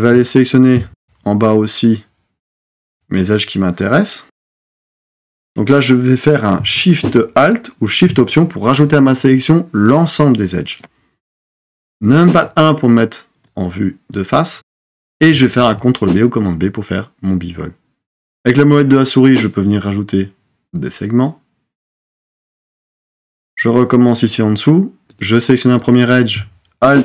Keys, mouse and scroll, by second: 12.1 KP_1, 15.5 super+b, 26.8 alt+click.